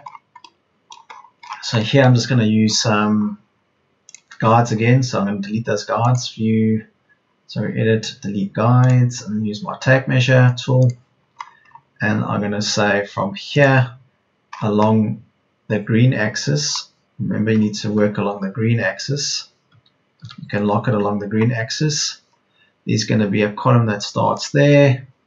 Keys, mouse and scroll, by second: 5.1 Return, 19.8 Right, 20.1 Left.